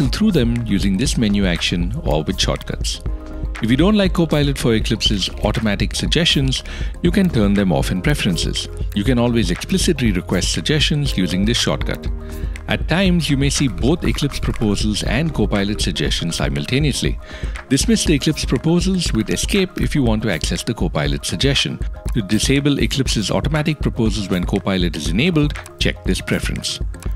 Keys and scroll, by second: 0.2 Tab, 0.3 Return, 2.7 alt+], 4.2 Tab, 4.4 Return, 7.1 Escape, 12.0 alt+\, 13.5 Escape, 19.8 Tab.